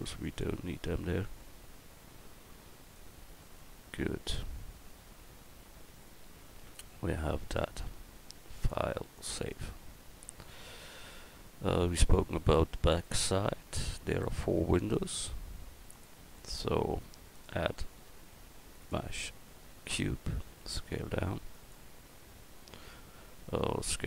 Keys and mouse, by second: 15.9-17.5 drag, 18.1 click, 20.4 s, 22.2-24.0 middle drag, 23.8 s.